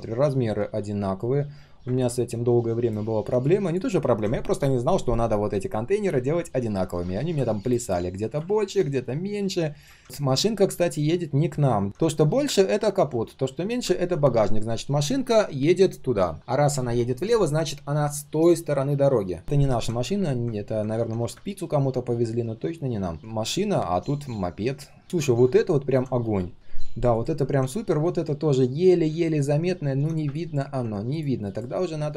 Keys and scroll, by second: 10.0 ctrl+z, 10.1 ctrl+shift+3.